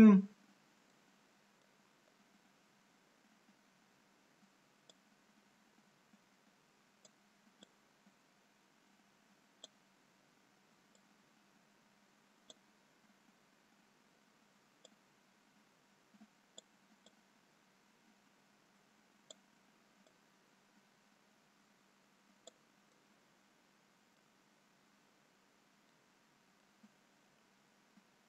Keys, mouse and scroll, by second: 1.0 middle click, 3.1-3.6 scroll down 2, 5.2 click, 7.8 click, 10.5-11.0 scroll down 3, 11.0 click, 14.9 click, 18.1 click, 20.4 click, 23.0 middle click, 24.6-25.3 scroll up 2, 26.1 middle click, 26.1 scroll up 1.